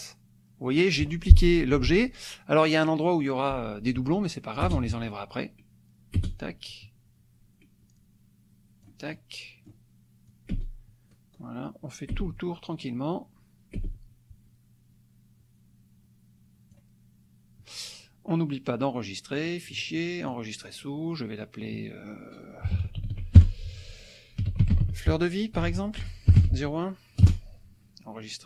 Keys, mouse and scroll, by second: 4.6 space, 6.2 space, 9.2 click, 10.2-16.9 drag, 10.5 space, 12.2 space, 13.8 space, 19.4 click, 20.3 click, 22.6 KP_1, 22.7 KP_9, 23.0 d, 23.3 c, 24.4-27.2 typing.